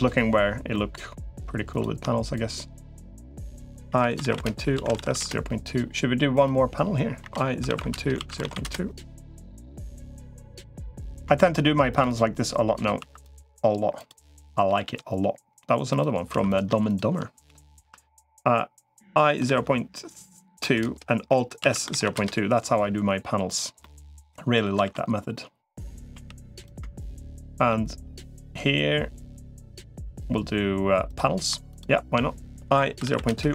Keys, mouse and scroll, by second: 0.5 middle click, 1.5 click, 2.1 shift+click, 3.7 i, 4.5 alt+s, 7.1 i, 8.1 alt+s, 9.3 middle click, 11.7 shift+click, 12.9 2, 14.5 g, 16.3 3, 17.7 i, 21.5 alt+s, 23.6 middle click, 24.7 ctrl+r, 26.1 3, 27.5 middle click, 30.9 click, 31.5 shift+click, 32.5 i, 33.3 alt+s.